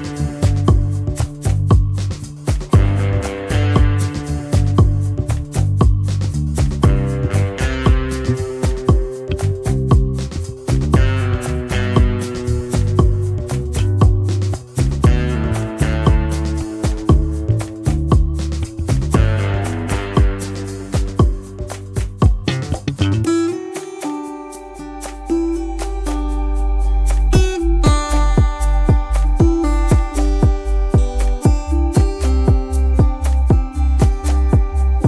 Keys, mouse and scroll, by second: 0.3 space, 1.5 shift+click, 5.0 alt+scroll down 1, 5.2 space, 5.7 alt+scroll up 1, 6.0 space, 9.6 double click, 15.1 ctrl+shift+], 16.0 shift+click, 16.6 right click, 17.9 double click, 21.4 space, 25.7 ctrl+2, 29.5 double click, 29.7 space, 30.1 double click, 30.2 space, 32.0 double click, 34.3 ctrl+shift+].